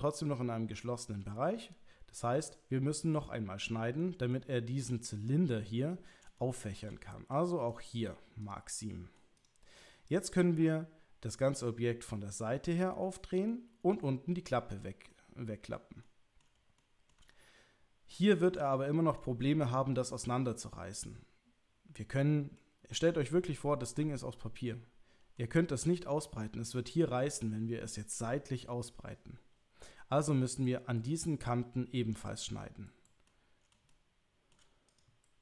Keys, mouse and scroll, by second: 1.2-3.2 middle drag, 4.0 middle click, 6.4 shift+middle click, 7.8 right click, 8.8 middle click, 9.4 click, 10.1 click, 10.4 middle click, 13.5 middle click, 15.1 middle click, 16.0 middle click, 16.8 shift+middle click, 18.7 shift+middle click, 22.5-25.4 middle drag, 30.9 middle click, 33.2-34.5 middle drag, 34.9 click.